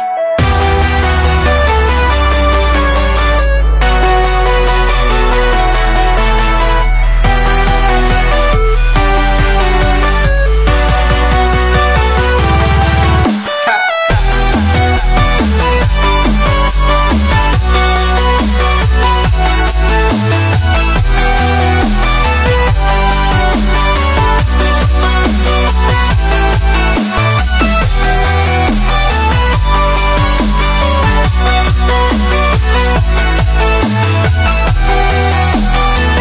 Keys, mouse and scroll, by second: 0.7-2.3 drag, 2.8 click, 3.7-5.4 drag, 5.5-7.9 drag, 8.2 click, 8.9 KP_0, 9.9-11.6 drag, 12.1 BackSpace, 12.8 KP_0, 14.6 scroll down 3, 14.8 middle drag, 15.1-16.0 scroll up 1, 16.0-19.6 drag, 19.9 s, 21.4 scroll down 1, 21.7 middle click, 22.6 click, 22.9-24.2 drag, 24.2 KP_0, 25.6-27.7 drag, 28.1 s, 29.7 click, 30.0-30.5 scroll up 7, 30.5 shift+middle drag, 30.6-31.3 scroll down 5, 30.7 middle drag, 31.3 shift+middle click, 31.6 click, 32.9 click, 33.6 click, 34.6 click, 34.9 click, 35.2 click.